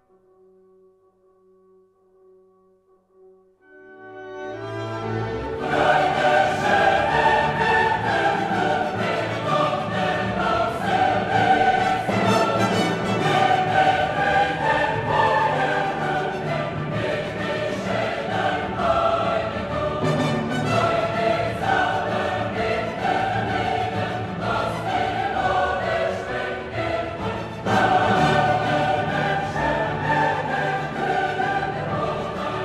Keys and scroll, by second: 9.0 ctrl+g.